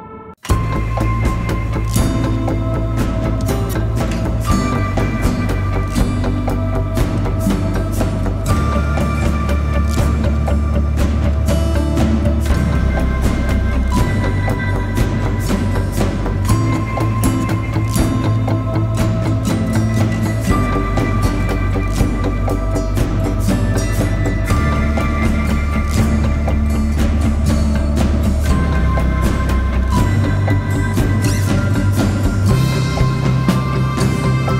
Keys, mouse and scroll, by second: 7.9 double click, 13.4-14.4 typing, 15.6 double click, 26.1 double click, 33.4 alt+click.